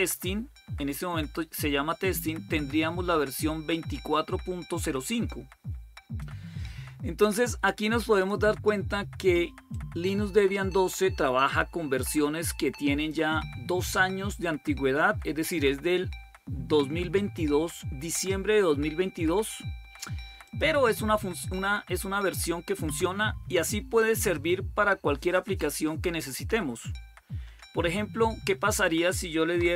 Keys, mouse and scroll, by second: 7.9 click, 9.5-12.9 drag, 20.2 click, 24.0 click, 29.1-29.7 typing.